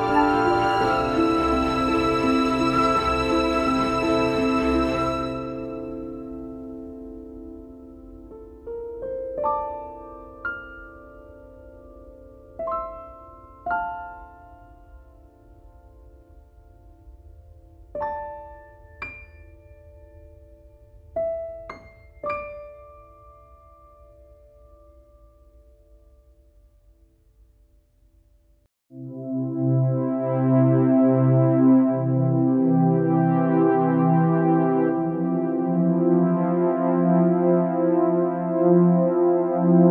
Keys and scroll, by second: 14.7 BackSpace, 15.8 BackSpace, 16.5 BackSpace, 22.4 scroll down 1, 23.1 scroll down 1.